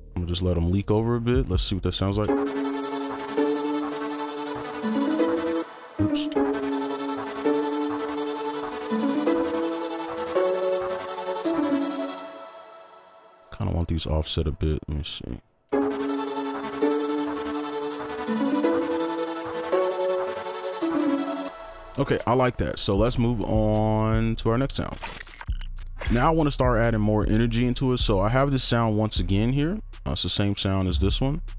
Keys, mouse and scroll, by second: 0.8 right click, 2.0 right click, 2.6-3.0 scroll down 1, 3.0-3.6 scroll up 1, 5.6 space, 6.3 space, 12.4 space, 12.8 ctrl+click, 13.1 shift+scroll down 1, 13.4 right click, 13.9 alt+click, 21.4 space.